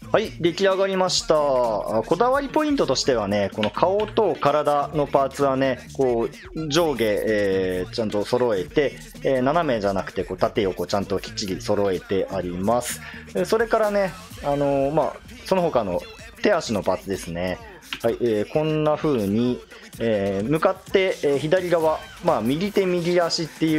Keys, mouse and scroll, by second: 3.6 l, 4.0 l, 17.5 click, 17.9 l, 18.5 l, 19.1 l, 20.0 l, 22.3-23.7 middle drag.